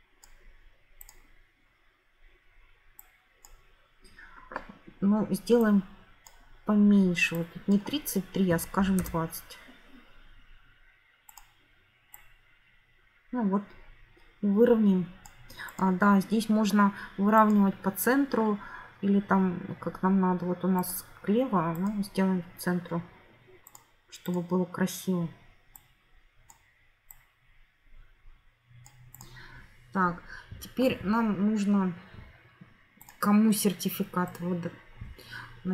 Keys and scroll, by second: 8.4-9.4 typing.